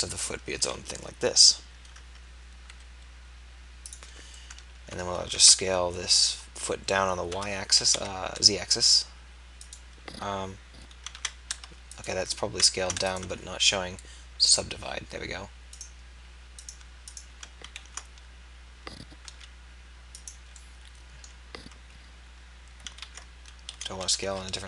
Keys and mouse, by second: 0.5-2.8 drag, 5.3 ctrl+a, 11.1 ctrl+a, 17.8 ctrl+a, 23.0 ctrl+a.